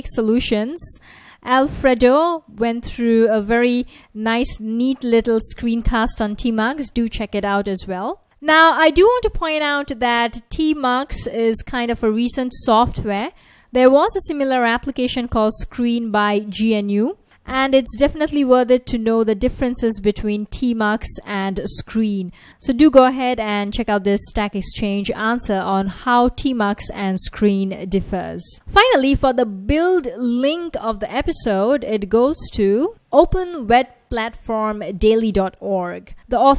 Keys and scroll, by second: 18.4 F1, 19.5 F1, 26.0 F1.